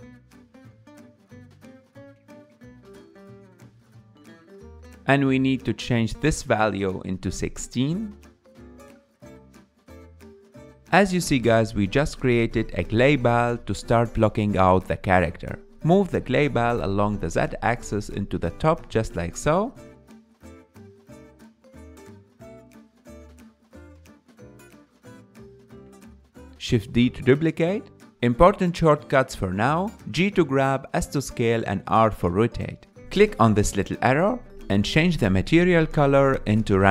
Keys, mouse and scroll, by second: 16.6 scroll down 1.